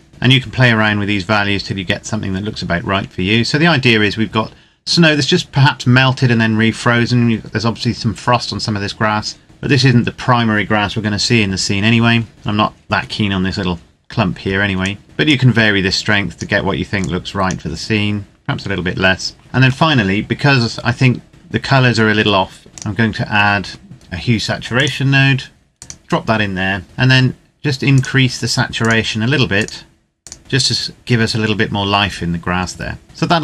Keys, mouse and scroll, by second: 0.1-1.5 scroll down 1, 1.5-3.3 scroll up 1, 9.4-11.1 scroll down 1, 14.8 click, 19.4 shift+middle click, 21.3-22.4 scroll up 1, 22.7 click, 24.7 click, 28.0 click.